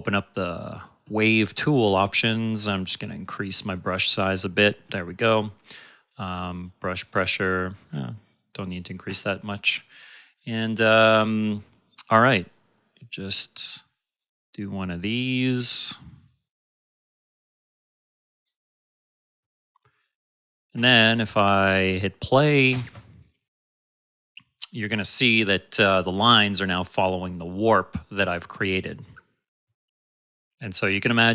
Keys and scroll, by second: 22.7 space.